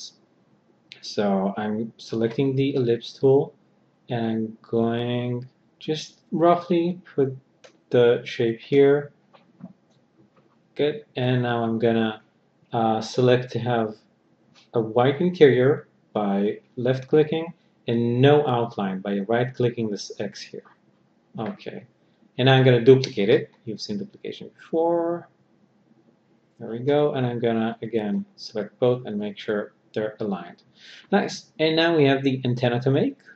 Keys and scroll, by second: 22.6 ctrl+d, 27.9 b.